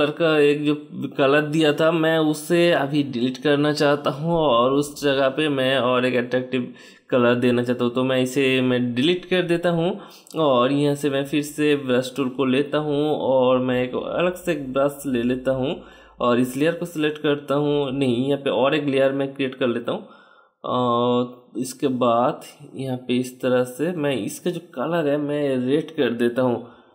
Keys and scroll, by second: 8.5 BackSpace, 20.5 [, 22.2 typing.